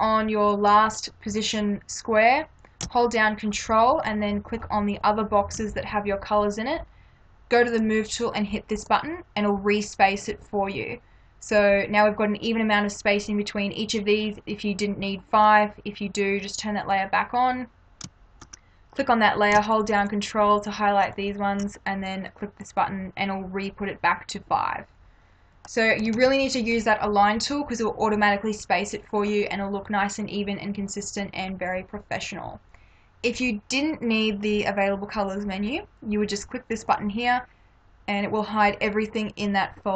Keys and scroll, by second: 26.2 ctrl+-.